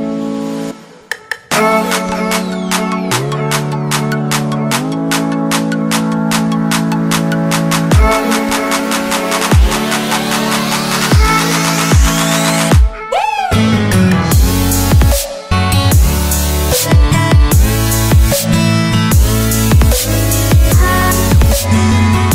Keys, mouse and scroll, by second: 11.7 click, 18.7 click.